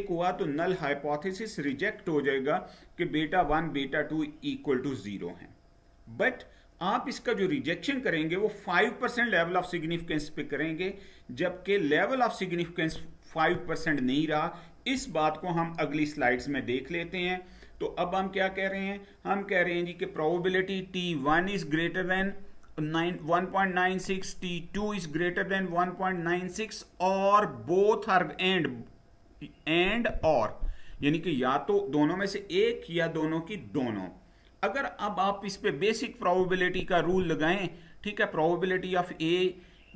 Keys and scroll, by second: 16.1 Down.